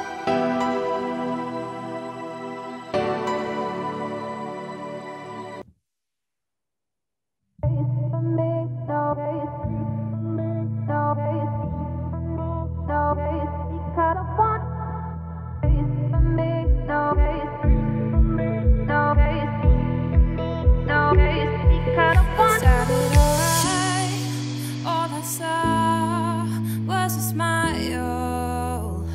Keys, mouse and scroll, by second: 0.9 scroll down 1, 1.2 scroll up 2, 1.4 3, 2.7 z, 3.2 click, 3.7 z, 4.7 shift+d, 8.0 r, 10.5 g, 11.4 1, 11.8 z, 12.2 click, 13.1 s, 15.1 click, 16.1 s, 17.6 z, 18.0 scroll down 1, 18.1 middle click, 18.4 2, 18.8 click, 19.0-19.6 scroll up 4, 19.6 scroll up 1, 19.7 shift+click, 20.0 scroll down 2, 20.1 middle click, 20.5 f, 21.1 click, 21.6 shift+click, 21.9-23.3 middle drag, 23.3 z, 23.7 middle click, 24.1 click, 24.5 3, 25.1 click, 25.5 2, 25.7 click, 27.1 shift+click, 28.1 g, 29.0 z.